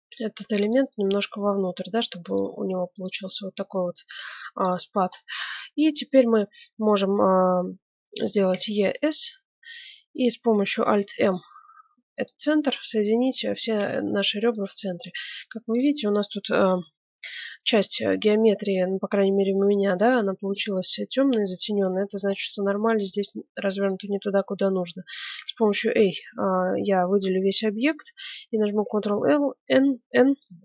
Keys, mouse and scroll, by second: 0.9-2.7 middle drag, 3.2-4.8 drag, 4.8-8.1 middle drag, 8.3 e, 10.8 alt+m, 12.8-15.5 middle drag, 15.7-16.7 right drag, 16.7 KP_Decimal, 16.9 middle click, 20.3-22.1 middle drag, 23.2-25.1 middle drag, 25.1 a, 25.3 a, 28.7 ctrl+n.